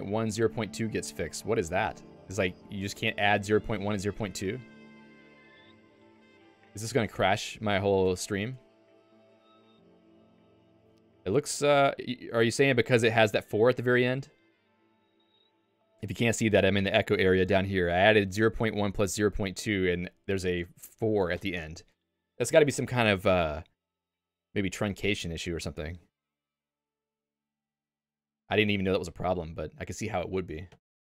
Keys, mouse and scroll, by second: 4.8 Escape, 5.4 alt+:, 9.5 Return, 30.9 Escape.